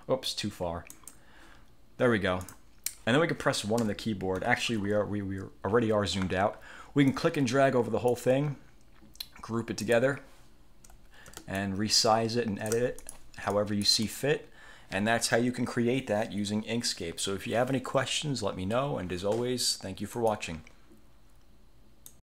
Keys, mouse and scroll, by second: 1.0 click, 2.5 click, 3.9 1, 4.8-5.1 scroll down 2, 5.8 scroll up 2, 6.2 scroll down 2, 7.2-8.4 drag, 10.0 click, 11.7-13.0 ctrl+shift+drag, 13.2 ctrl+shift+click, 13.6-14.5 ctrl+shift+drag, 20.3 click, 22.2 click.